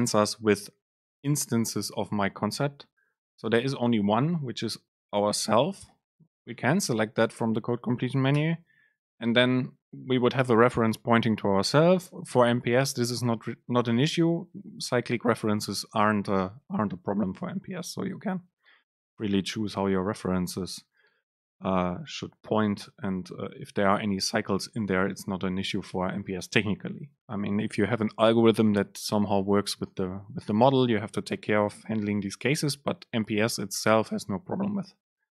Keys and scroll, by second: 7.0 super+space.